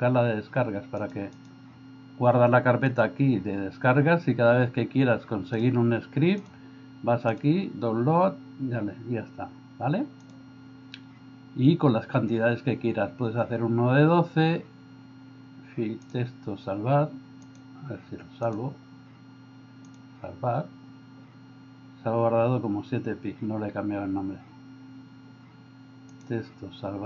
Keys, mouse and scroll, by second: 16.1-17.5 drag, 18.5-20.0 drag, 26.2-27.0 drag.